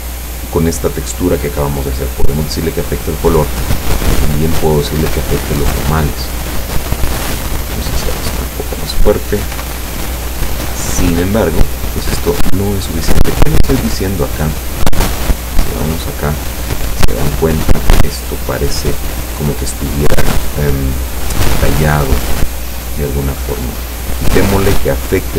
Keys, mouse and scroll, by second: 5.4 click, 7.0-8.3 drag, 9.6 p, 12.5 Escape, 13.3-14.8 scroll up 7, 15.6 click, 23.0 click, 24.0-25.2 drag.